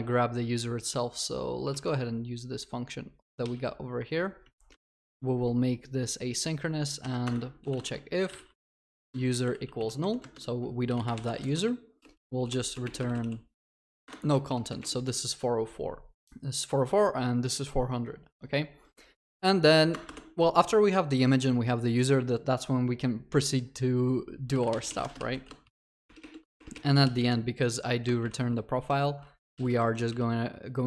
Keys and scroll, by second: 2.0 ctrl+c, 4.7 alt+Return, 14.1 Return, 26.1 ctrl+BackSpace.